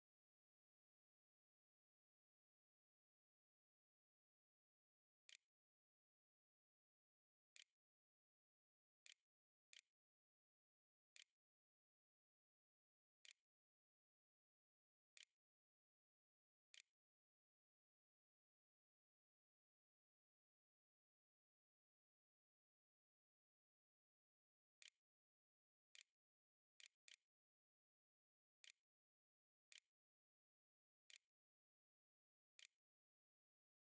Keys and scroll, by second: 3.1-4.6 typing, 4.8 Return, 5.8 ], 6.4 [, 8.0 s, 8.6 a, 9.5 s, 10.2 a, 11.0 Tab, 11.7-19.3 typing, 15.0 Tab, 23.6-26.2 typing, 25.0 shift+Up, 26.3 Return, 27.7 ;, 27.8 ., 27.9 ,, 28.4 b, 30.9 Tab, 31.1-33.8 typing.